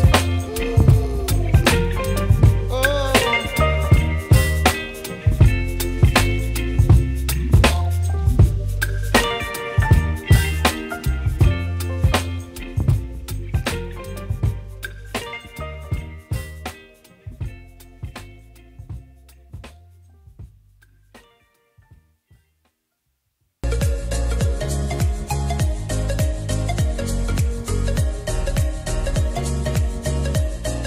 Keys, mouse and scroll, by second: 16.3 5, 17.1 middle click, 23.7 right click, 25.6 double click, 27.0 click, 29.1 right click, 29.2-30.8 drag.